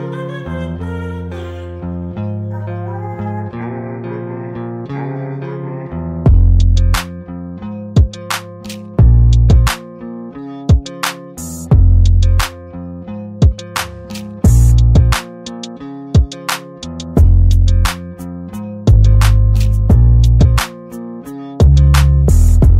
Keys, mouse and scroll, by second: 9.5 right click, 10.2-11.8 drag, 12.5 right click, 13.5 click, 15.0 right click, 15.5 click, 18.0 shift+click, 19.3 click, 19.9-21.9 drag, 22.1 Delete.